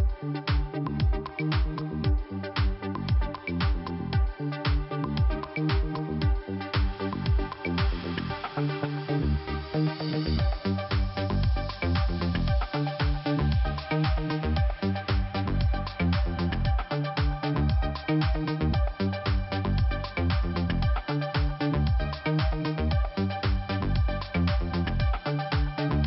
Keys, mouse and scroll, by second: 2.7 scroll up 2, 3.7 click, 9.4 click, 10.7 click, 12.1 scroll down 1, 13.9 click, 14.9 click, 16.9 click, 17.9 click, 18.8-19.2 scroll down 1, 20.1 scroll down 1, 21.6 scroll down 1, 21.7-22.0 scroll up 2, 23.0 scroll up 1, 23.9 click, 25.2 click.